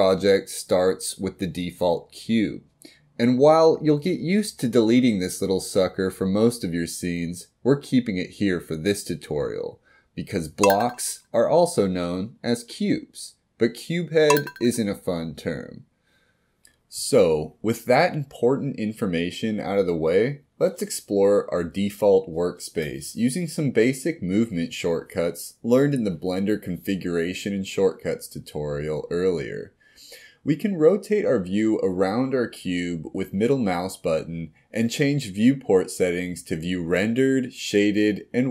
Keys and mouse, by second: 0.0-29.8 middle drag, 30.1-31.9 middle drag, 33.0-35.7 middle drag, 37.6 click.